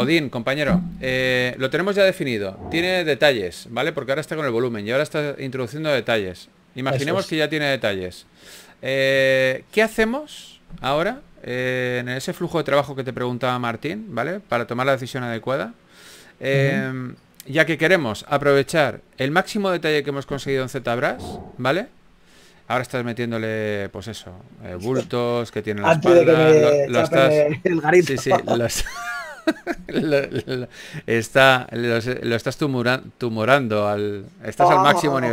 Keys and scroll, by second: 0.1 s, 10.4 b, 13.6-14.3 typing, 16.9 typing, 18.8 typing.